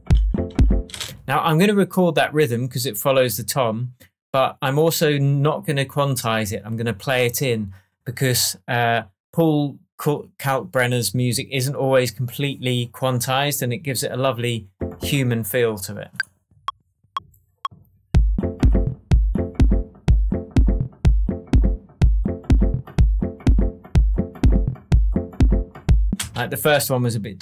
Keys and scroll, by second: 0.8 space, 26.1 space.